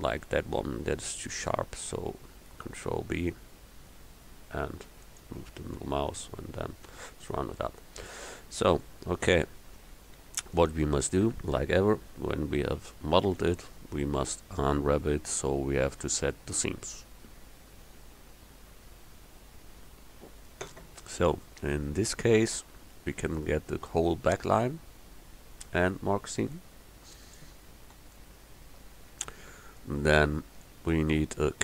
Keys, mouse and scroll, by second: 1.5 ctrl+b, 6.0 Tab, 8.8 KP_1, 21.9 Tab, 27.9 a.